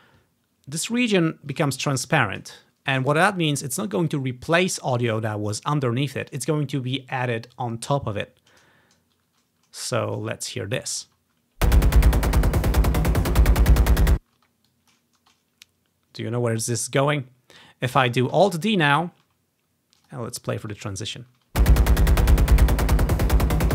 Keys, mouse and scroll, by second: 0.0-2.9 drag, 2.3 scroll down 1, 3.2-4.5 ctrl+drag, 11.4 space, 14.4 space, 14.8-18.0 drag, 18.5 alt+d, 20.1 click, 20.7-22.0 scroll up 1, 21.5 space.